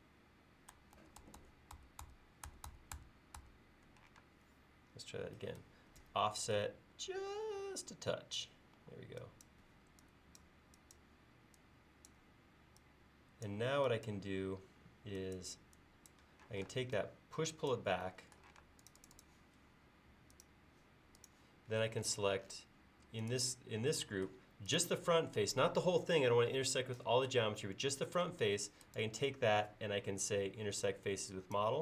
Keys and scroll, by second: 1.0 super+z, 6.0 f, 8.8 e, 16.5 p, 18.6 space.